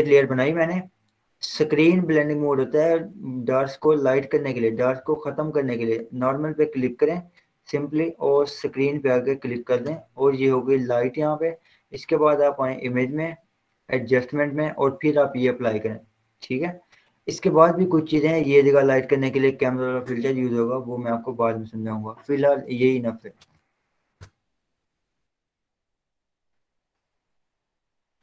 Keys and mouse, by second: 5.0 click, 9.5 click, 9.8 Return, 12.7 click, 15.8 click, 17.9 click, 22.7 click, 23.7 ctrl+w, 24.1 Down, 24.3 Return, 26.4 click.